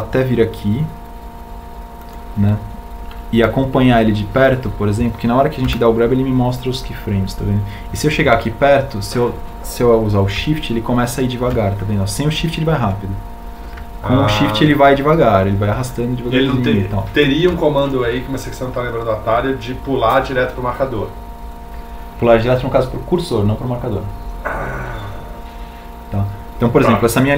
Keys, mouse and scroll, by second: 1.1 g, 9.2 g, 12.9 shift+g, 15.6 g, 18.1 shift+g.